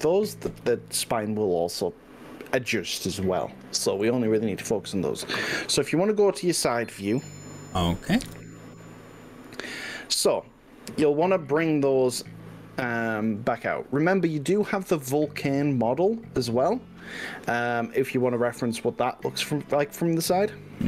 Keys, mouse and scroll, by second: 8.3 KP_8, 8.3 KP_3, 10.1-10.9 scroll down 4, 11.7-13.3 shift+middle drag, 14.0 click.